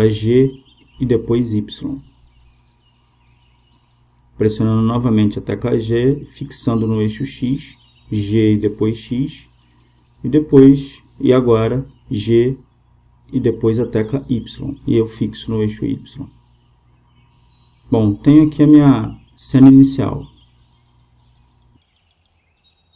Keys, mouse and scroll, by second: 1.4 g, 4.9-7.0 right drag, 6.4 g, 11.8 g.